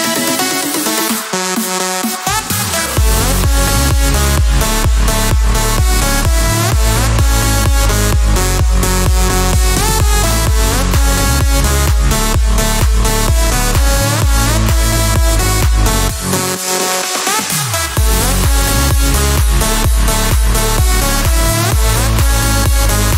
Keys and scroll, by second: 2.8 Escape, 7.0 Escape.